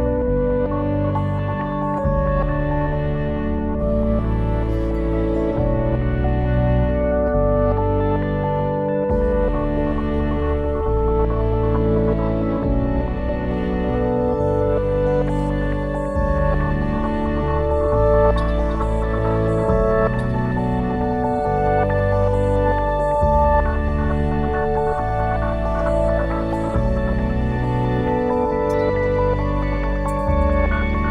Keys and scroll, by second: 3.7 shift+l, 4.1 e, 5.1 Return, 9.1 ctrl+z.